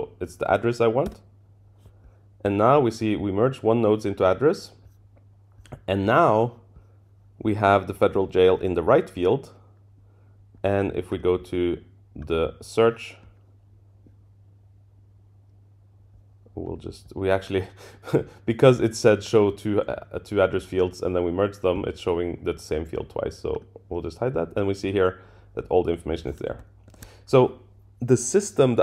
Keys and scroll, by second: 1.1 Return, 26.9 super+[.